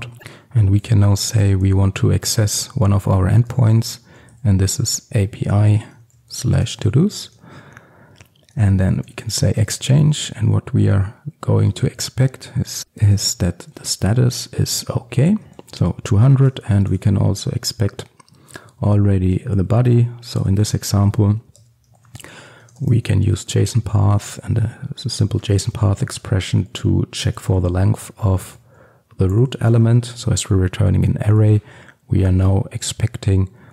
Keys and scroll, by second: 1.3 Return, 9.7 Return, 13.9 Return.